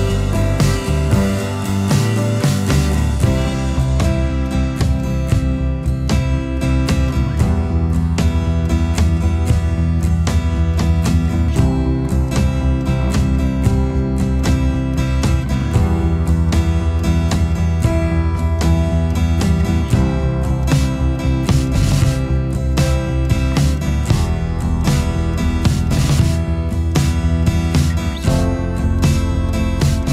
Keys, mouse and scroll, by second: 19.9 space, 23.3 shift+click.